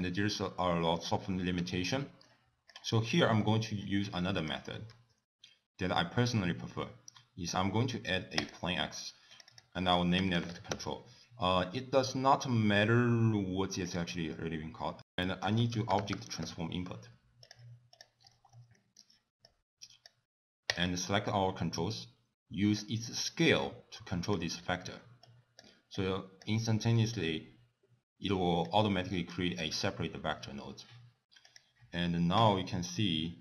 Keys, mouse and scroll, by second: 1.6 x, 2.0 middle click, 2.7 click, 3.0 middle click, 3.4 scroll down 4, 4.4 click, 4.9 shift+a, 9.3 click, 9.5 click, 13.9 click, 15.0 ctrl+a, 15.0 middle click, 15.0 click, 18.2-19.0 scroll up 6, 18.8 middle click, 19.4 click, 20.7 click, 21.6 middle click, 22.8 click, 24.8 middle click, 25.3 click, 25.9 click, 26.7 middle click, 27.2-27.7 scroll down 2, 28.7 click, 31.4 click, 32.4 click.